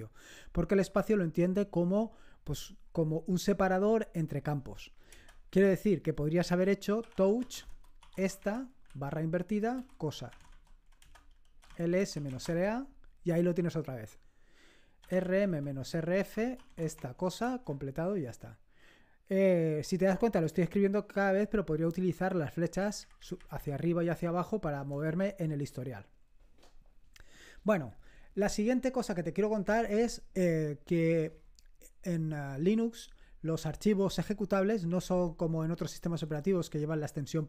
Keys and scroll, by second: 5.0 Return, 6.7-12.7 typing, 14.7-17.1 typing, 17.3 Return, 22.7 Up, 22.9 Up, 23.1 Up, 23.3 Up, 23.9 Down, 24.1 Down, 24.3 Down, 24.5 Down, 24.7 Down, 24.9 Down.